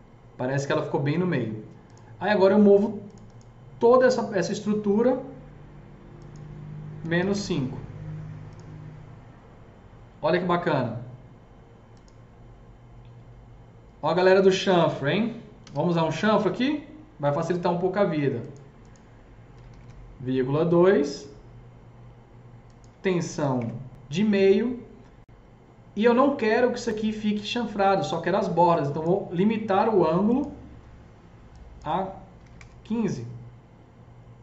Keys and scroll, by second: 7.0 KP_Subtract, 7.2 Return, 7.2 KP_5, 15.4-16.1 typing, 16.2 Return, 19.6 Return, 19.6 KP_Decimal, 19.6 KP_2, 32.3 KP_1, 32.3 KP_5, 32.6 Return.